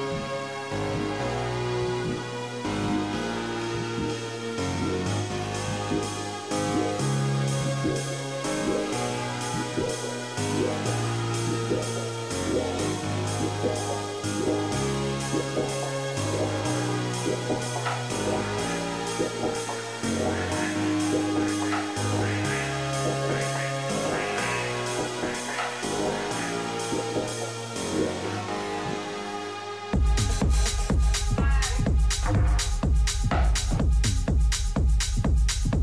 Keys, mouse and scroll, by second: 1.8 Tab, 2.4 a, 2.6 a, 3.2-5.8 middle drag, 5.8-7.5 right drag, 7.8-10.6 right drag, 9.9-12.1 middle drag, 12.1-13.9 drag, 13.9 click, 14.5-17.0 middle drag, 22.6 a.